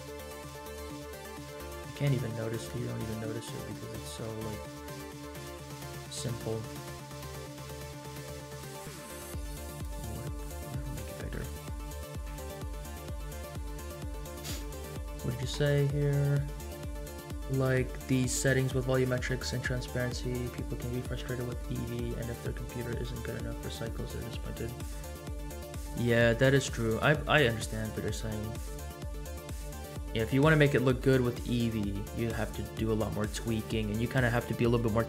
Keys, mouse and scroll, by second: 1.5-1.8 scroll up 3, 2.0 shift+middle click, 2.8 shift+middle click, 3.2 scroll up 2, 3.9 shift+middle drag, 4.9-5.8 scroll down 2, 5.8 scroll down 1, 6.4-6.7 middle drag, 6.9 scroll up 1, 7.3-7.7 scroll down 2, 8.1 scroll down 1, 8.5-9.1 middle drag, 9.7 click, 10.3 middle click, 10.7 Tab, 10.7 scroll up 2, 11.1 shift+middle click, 12.5 Tab.